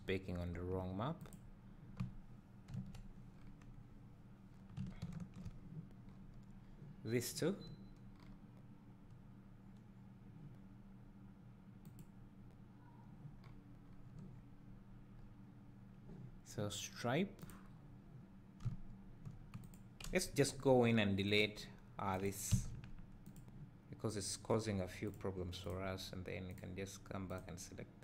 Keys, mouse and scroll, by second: 1.3 click, 2.7 KP_Decimal, 3.3-4.8 scroll down 2, 5.1 ctrl+l, 8.5-10.1 scroll down 2, 12.0-13.5 drag, 13.5-13.8 scroll down 2, 17.7 click, 21.0 Delete, 21.3 click, 22.2 click, 22.6 Delete, 23.3 click, 25.1 drag, 25.7 click, 26.5 drag, 27.3-27.9 drag.